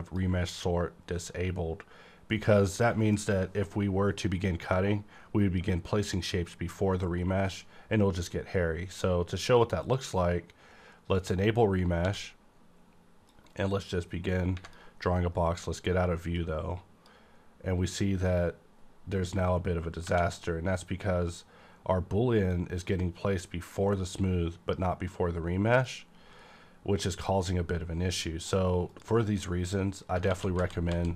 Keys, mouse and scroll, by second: 0.0 click, 2.7-5.0 middle drag, 2.7 click, 7.4 click, 9.8 click, 12.0 d, 13.3-22.5 drag, 20.0 Right, 22.5-28.4 drag, 30.3 z, 30.5 z, 30.9 z.